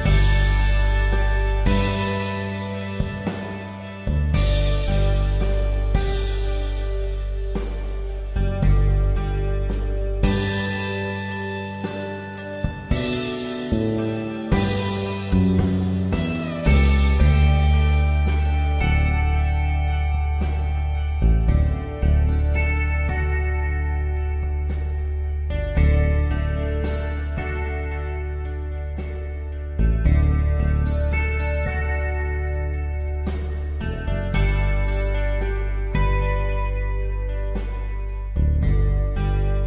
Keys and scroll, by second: 2.0 Return, 4.8 typing, 7.2 ctrl+x, 7.6 ctrl+Tab, 8.1 ctrl+v, 12.0 Return, 12.3 v, 14.7 m, 18.4 ctrl+x, 18.6 ctrl+Tab, 19.2 ctrl+v, 20.3 ctrl+t, 23.4 Return, 27.7 ctrl+t, 29.9 Escape, 31.2 ctrl+t, 33.2 Return, 35.8 Return.